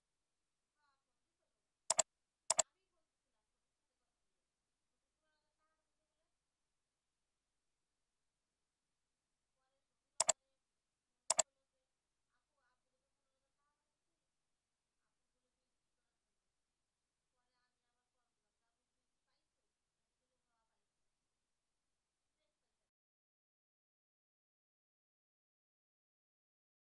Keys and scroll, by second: 1.2 ctrl+b, 14.0 ctrl+z, 17.5 ctrl+Return, 20.9 ctrl+z.